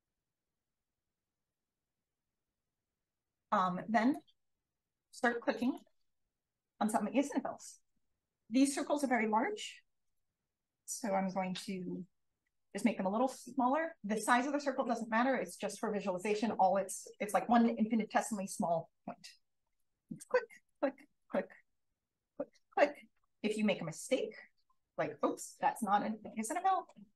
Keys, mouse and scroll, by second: 0.3-1.1 drag, 1.2 click, 4.9 click, 5.6 click, 6.5 click, 10.6-12.6 drag, 20.1-20.7 drag, 21.1 click, 22.1 drag, 22.6 click, 24.7 click.